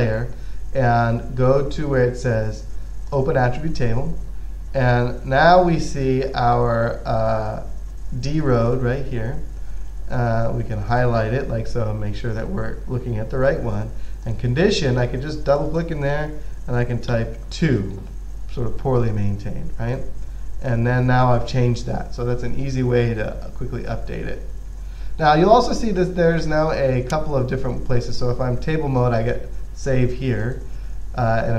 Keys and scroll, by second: 17.4 2.